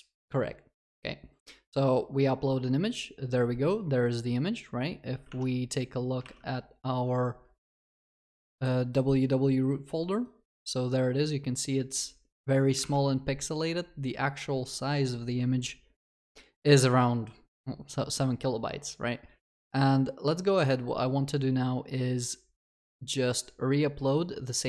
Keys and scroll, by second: 6.2 alt+1.